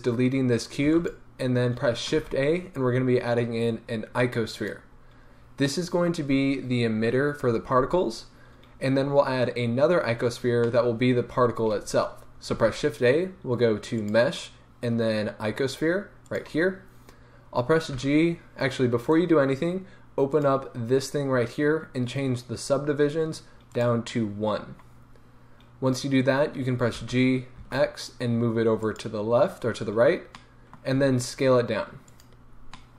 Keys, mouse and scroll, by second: 0.8 x, 2.2 shift+a, 5.2 scroll up 1, 5.7-11.9 middle drag, 12.5 shift+a, 17.9 g, 19.1-20.3 right drag, 20.3 click, 23.7-28.9 drag, 26.9 g, 30.2 scroll, 30.4-32.2 middle drag, 31.0 s, 32.2 click, 32.7-32.9 middle drag.